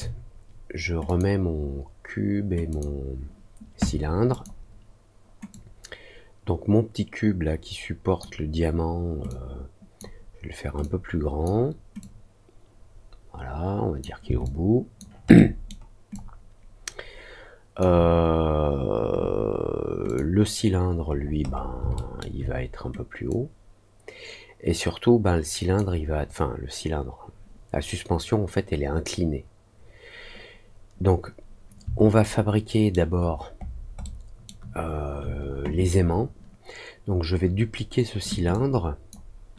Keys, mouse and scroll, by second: 1.0 click, 2.6 click, 4.2 click, 5.4-8.1 drag, 9.2 click, 10.7 click, 11.9-13.9 drag, 14.4 alt+click, 15.3 alt+middle click, 16.1-17.7 alt+drag, 20.0 click, 21.0-21.6 scroll down 2, 21.9 alt+middle click, 23.2-25.7 drag, 32.1 alt+middle click, 33.1 alt+scroll down 1, 33.5 alt+middle click, 34.0 alt+middle click, 38.4 ctrl+click.